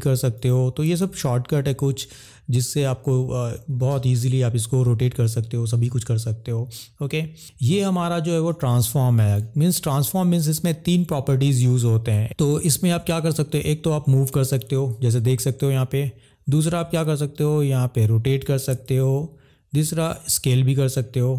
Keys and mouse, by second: 0.4 click, 1.1 ctrl+z, 8.5 click, 9.7 middle click, 12.2 ctrl+z, 13.4 click, 16.8 click, 18.9 ctrl+z, 20.2 click.